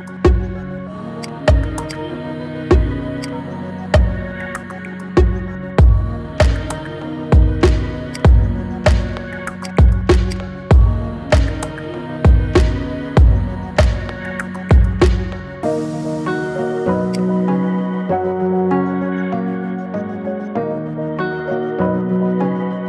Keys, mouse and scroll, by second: 0.4-1.5 scroll down 12, 1.5 drag, 3.5-5.2 drag, 5.2-5.7 scroll up 2, 5.7-6.1 shift+middle drag, 6.4-8.3 middle drag, 8.3 click, 8.9-9.8 scroll up 12, 9.8-11.6 drag, 11.6-14.3 scroll down 2, 15.8-16.5 scroll up 2, 16.5-17.4 scroll down 1, 17.4 click.